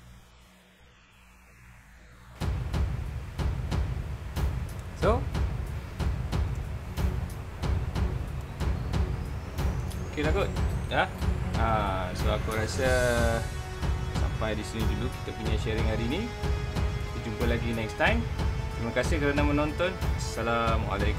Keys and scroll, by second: 4.8 space, 7.3 alt+super+space, 8.1 super+space.